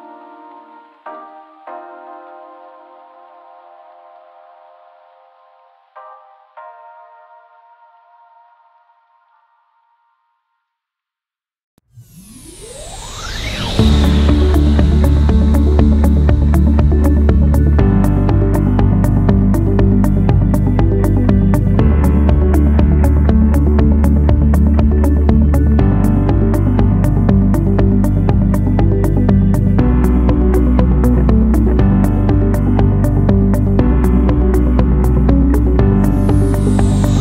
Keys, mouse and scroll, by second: 16.2 6, 16.6 0, 17.0 Return, 22.2 7, 22.6 5, 23.0 Return.